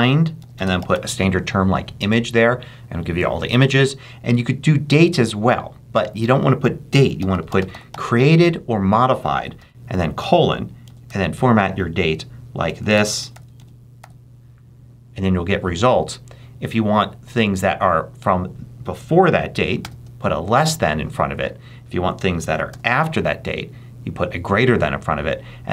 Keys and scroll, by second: 1.7 e, 3.4 super+a, 3.5 super+BackSpace, 4.5 BackSpace, 6.7-8.3 typing, 9.5-14.4 typing, 19.7 shift+,, 22.3 BackSpace, 22.6 shift+..